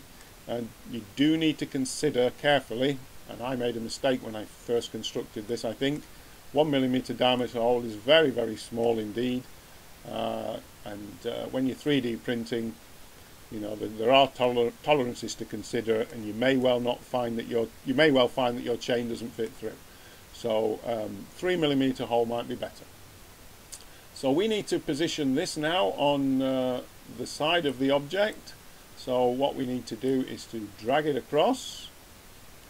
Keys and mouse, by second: 0.1-5.4 middle drag, 23.6-27.6 middle drag, 27.6-29.6 drag, 30.0-31.7 drag.